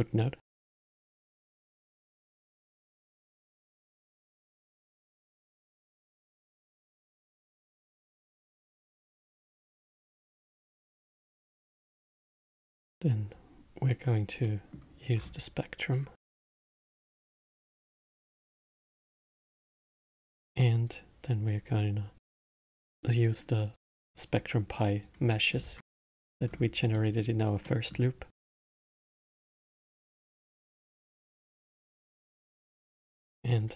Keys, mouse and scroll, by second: 1.9-3.8 drag, 5.2 click, 7.3-9.4 drag, 11.1 scroll down 2, 12.1-13.3 middle drag, 13.3 click, 14.5-15.2 middle drag, 15.2-16.5 scroll up 6, 16.9 click, 19.1 scroll up 2, 19.7-20.9 middle drag, 20.9 drag, 25.6-26.0 scroll down 4, 26.0 middle click, 26.5-26.9 scroll down 4, 26.9-29.0 middle drag, 29.0 drag, 30.8 click.